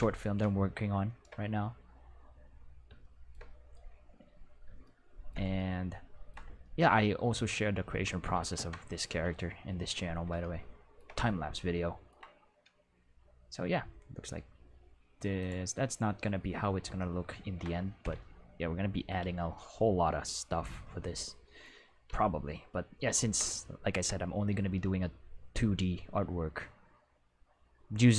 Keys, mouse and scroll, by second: 8.5 Home, 15.4 click, 16.9 ctrl+middle click, 19.2 ctrl+s, 19.8-22.1 ctrl+middle drag, 22.1 ctrl+s.